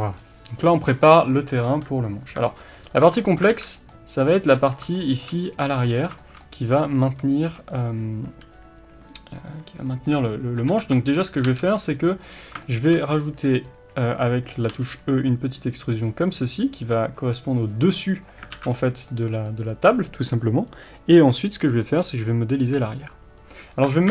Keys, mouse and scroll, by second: 0.1-0.8 scroll up 1, 0.8 click, 2.2 KP_3, 3.0 scroll up 1, 3.1 Tab, 3.5 alt+a, 3.9-4.5 middle drag, 4.5-5.0 scroll up 1, 5.8-6.2 scroll down 1, 6.2 shift+middle click, 6.6 scroll up 1, 6.8 middle click, 10.7 a, 10.9 shift+middle click, 11.4 g, 12.6 shift+middle click, 14.7 e, 18.5 alt+a, 18.7-19.1 scroll down 1, 19.1-24.1 middle drag, 22.8-23.9 scroll up 1.